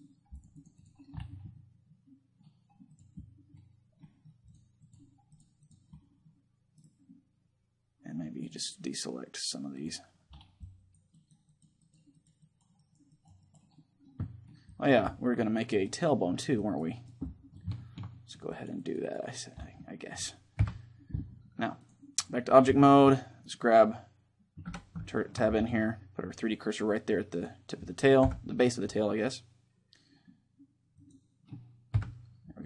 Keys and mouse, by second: 1.3-7.3 middle drag, 2.7-7.3 drag, 6.7-8.1 right drag, 8.1-9.9 drag, 10.4-20.8 drag, 13.5-21.3 middle drag, 20.3 KP_3, 22.0-23.2 drag, 22.5-24.4 middle drag, 23.2-24.8 right drag, 24.4 Tab, 24.8-26.6 middle drag, 26.1-28.9 drag, 27.9 KP_7, 30.7-32.6 drag, 31.7 KP_3.